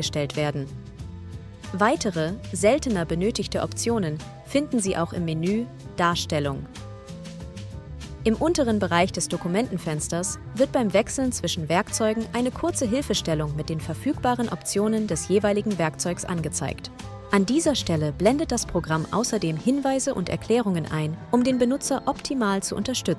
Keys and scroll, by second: 13.6 e, 16.8 v, 19.4 9.